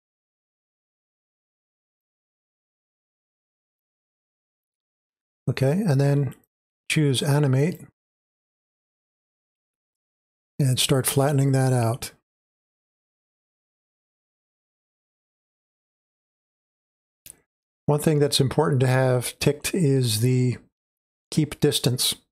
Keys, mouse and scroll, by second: 1.9-7.9 drag, 8.9 middle click, 8.9-9.8 scroll down 2, 9.8 space, 9.9-22.3 drag.